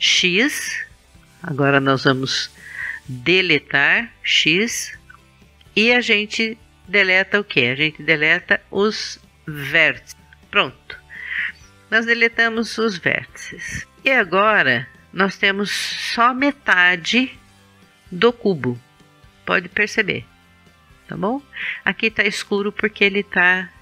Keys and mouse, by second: 4.3 x, 16.7 middle click.